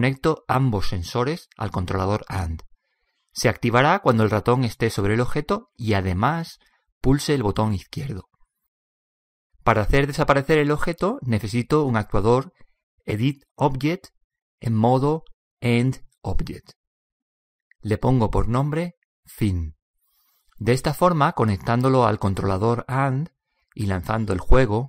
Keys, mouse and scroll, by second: 22.8 click, 24.4 p.